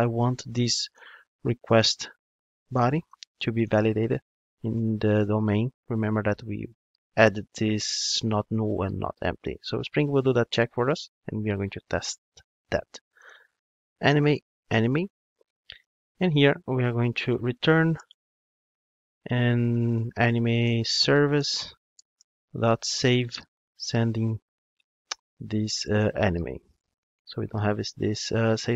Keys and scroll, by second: 3.7 Return, 10.2 ctrl+Tab, 13.8 Return, 21.3 Return, 25.9 Return.